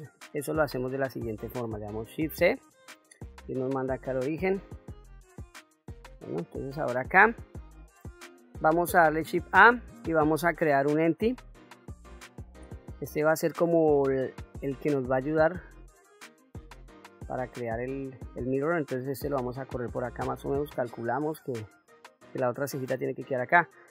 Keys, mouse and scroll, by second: 0.6 click, 2.4 shift+c, 3.9 KP_1, 4.5-5.5 scroll up 5, 6.0-6.7 shift+middle drag, 7.2-8.1 shift+middle drag, 9.3 shift+a, 13.9-16.1 drag, 17.6 shift+middle click, 19.1-21.9 drag.